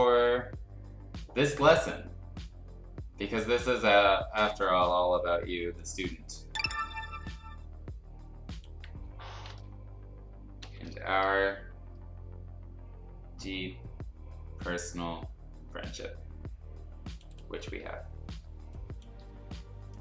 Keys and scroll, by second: 10.6 ctrl+o, 18.5 space, 19.8 space.